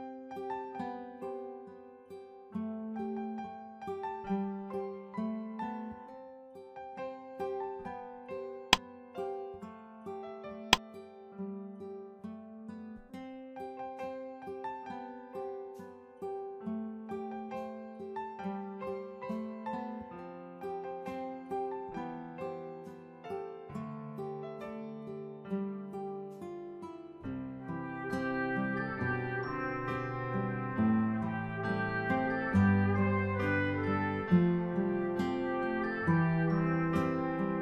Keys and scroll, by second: 3.1 ctrl+=, 22.0-24.4 typing.